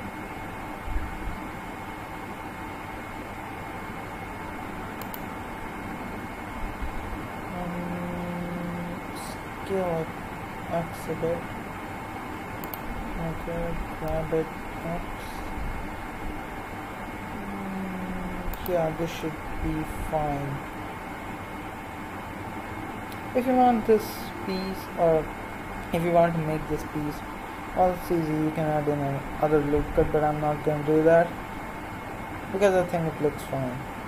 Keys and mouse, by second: 9.0 s, 13.5 g, 27.9-34.0 middle drag.